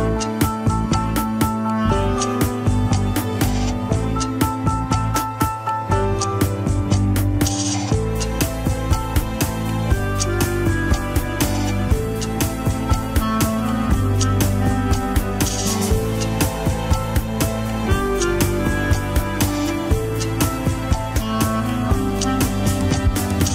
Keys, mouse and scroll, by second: 0.0 middle click, 0.8 shift+z, 1.5-2.8 middle drag, 2.8 ctrl+click, 3.3 Tab, 4.4 click, 5.0 Tab, 5.9 ctrl+click, 6.5 Tab, 7.4 click, 8.1 Tab, 8.5-9.6 middle drag, 9.6 ctrl+click, 10.0 Tab, 11.1 click, 11.7 Tab, 12.6 ctrl+click, 13.6 middle click, 13.9-14.8 scroll down 1, 14.9 ctrl+click, 15.7 KP_1, 16.8 ctrl+click, 17.3 middle click, 17.7 scroll down 1, 17.8 KP_1, 18.1 ctrl+Tab, 18.5 alt+z, 19.0 click, 19.3 shift+z, 19.5 scroll up 3, 20.4 ctrl+Tab, 20.7 middle click, 21.6 click, 22.1 KP_1, 22.2-22.8 scroll up 3, 22.6 shift+middle click, 23.1 g.